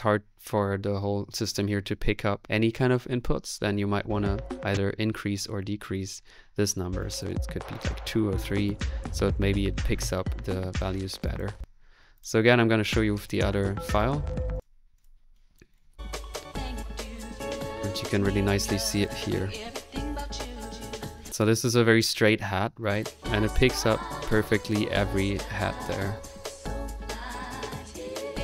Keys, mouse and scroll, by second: 7.0 click, 8.4 click, 10.8 ctrl+z, 11.4 ctrl+click, 11.4-12.4 typing, 13.2 click, 13.9 click, 14.5 click, 15.3-16.4 drag, 15.9 2, 16.4-17.4 middle drag, 17.4 click, 18.9-21.1 drag, 21.1 space.